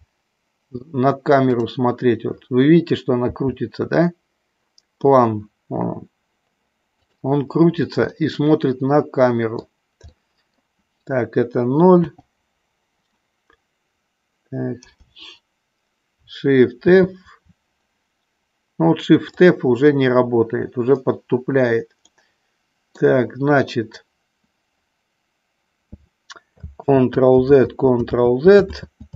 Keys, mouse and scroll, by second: 3.3 g, 8.2-9.7 middle drag, 10.2 middle click, 12.2 o, 14.8 KP_0, 16.8 shift+f, 22.1-23.1 middle drag, 27.5 ctrl+z, 28.1 ctrl+z, 28.7 ctrl+z.